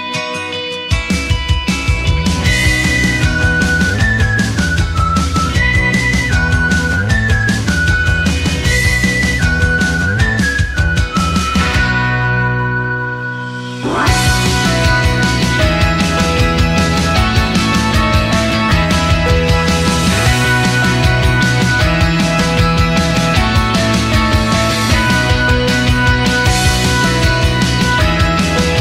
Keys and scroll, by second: 14.7-15.9 typing.